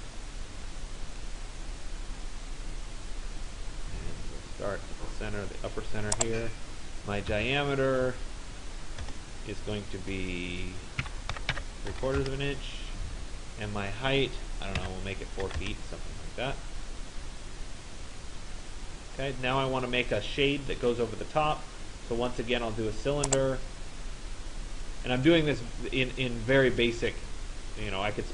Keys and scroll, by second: 8.6 Return, 11.0 Delete, 11.1-12.1 typing, 12.2 Return, 14.9 4, 15.6 Return.